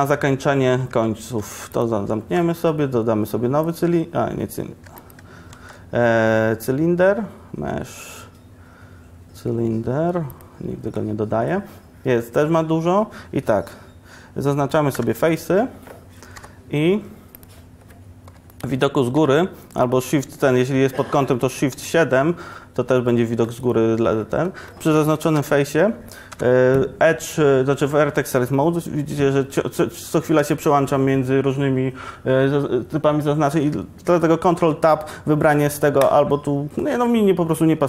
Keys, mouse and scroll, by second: 1.0 Tab, 1.5 x, 2.3 shift+a, 4.9 x, 5.6 shift+a, 12.3 Tab, 15.0 Tab, 15.0 3, 16.5 i, 17.6-19.2 drag, 19.2 KP_1, 20.0 KP_7, 25.4 KP_7, 26.4 1, 34.6 ctrl+Tab.